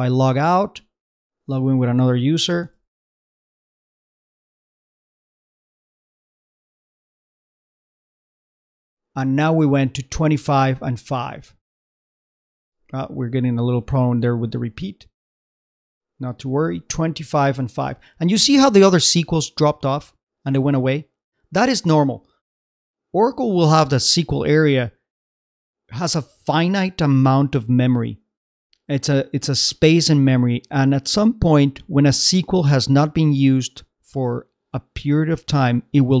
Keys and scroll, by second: 7.1 super+Tab, 12.6 ctrl+c.